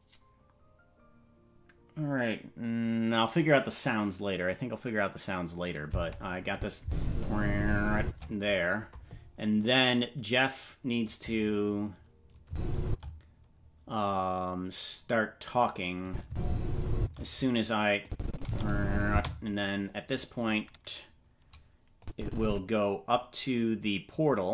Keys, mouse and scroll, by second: 6.5 click, 6.8 space, 8.0 space, 12.4 space, 12.8 space, 16.0 click, 16.9 space, 18.0 click, 18.4 space, 19.1 space, 22.0 click, 24.0-24.5 drag.